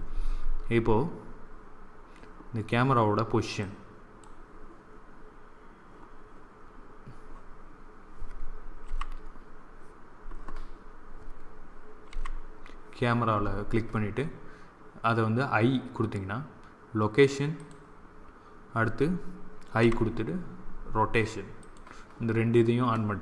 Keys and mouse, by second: 11.9 2, 21.6 i.